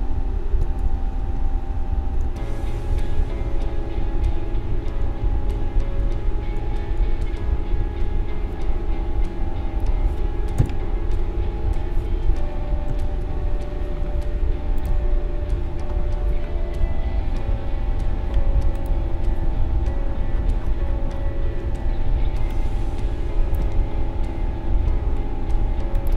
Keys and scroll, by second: 0.8 shift+Left, 2.2 Down, 7.8 Right, 10.5 Left, 12.7 ctrl+-, 12.9 ctrl+0.